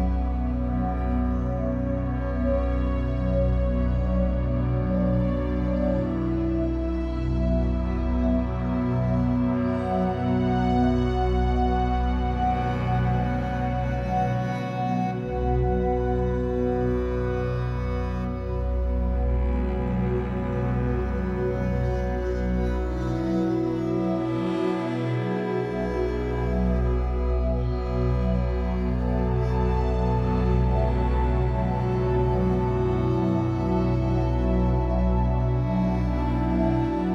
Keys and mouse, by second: 0.2-1.0 drag, 4.7-6.2 drag, 5.4 shift+d, 6.4 click, 6.9 click, 7.0 space, 9.2 space, 9.7 space, 10.5 space, 11.8-13.2 drag, 13.2 d, 14.4-15.9 drag, 15.7 space, 17.3 space, 18.3 d, 19.0-21.6 drag, 19.8 space, 21.6 typing, 22.5-23.6 drag, 23.3-24.9 typing, 24.1-25.4 drag, 27.1 middle click, 27.1-27.6 typing, 28.7 d, 29.8 Escape, 30.9 ctrl+z, 32.6 d, 33.2 click, 34.2 right click, 34.3-37.0 drag, 34.4 space, 37.0 space.